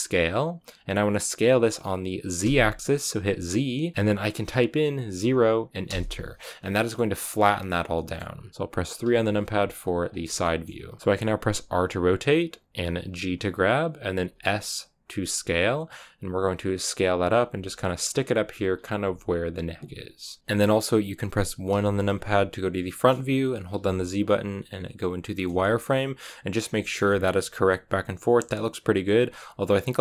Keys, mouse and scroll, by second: 6.3 scroll down 2, 6.5-9.0 middle drag, 9.0 KP_3, 10.3-11.5 shift+middle drag, 11.5 r, 12.9 g, 14.1 s, 17.2 g, 18.5 s, 18.9 g, 20.4 KP_3, 21.6 KP_1, 22.8-25.4 shift+middle drag, 25.4 z, 26.7 shift+middle click, 26.9-27.7 scroll up 3.